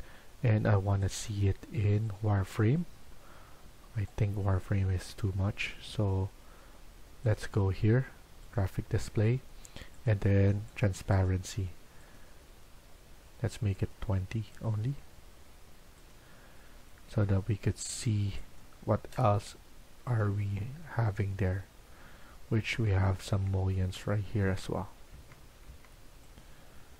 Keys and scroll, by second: 19.1 Delete, 20.1 Delete, 22.7 Tab, 23.2 Tab, 23.7 Tab, 24.3 Tab, 25.0 Tab, 25.7 Tab.